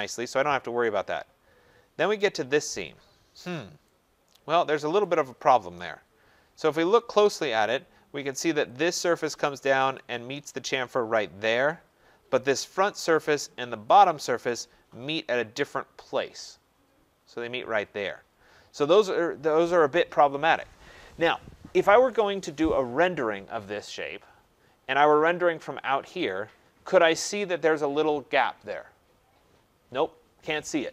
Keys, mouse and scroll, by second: 0.0 scroll, 0.9-3.0 scroll, 5.0 right click, 5.7 middle click, 6.3 middle click, 8.7 click, 9.9 click, 9.9 scroll, 12.8 click, 14.0 click, 24.5-25.6 scroll, 26.2 click.